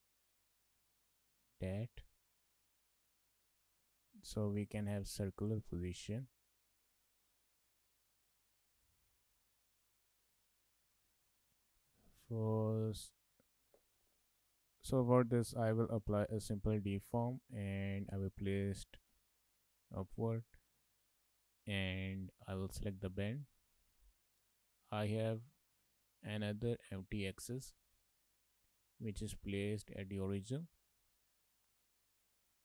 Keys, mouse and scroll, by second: 0.5 click, 1.2 click, 4.2 shift+middle click, 4.4 middle click, 7.3 click, 8.8 click, 11.1 shift+middle click, 11.4 middle click, 12.0 shift+middle click, 12.2 middle click, 12.6 middle click, 15.5 click, 18.1 click, 22.5 click, 25.0 click, 29.0 shift+middle click, 29.2 shift+middle click, 30.1 middle click, 31.6 click.